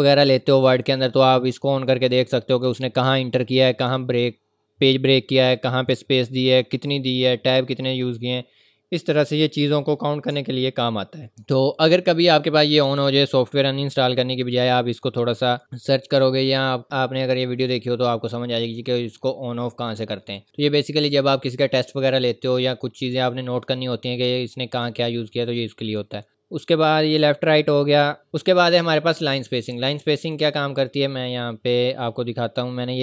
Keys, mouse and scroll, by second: 2.4 click, 9.2 scroll up 1, 10.5 scroll up 1, 11.3 scroll up 1, 11.4 scroll down 1, 13.1-15.4 scroll up 1, 17.6 click, 20.0 scroll up 1, 20.4 click, 30.2 click, 31.4-32.2 scroll down 1, 32.6 click.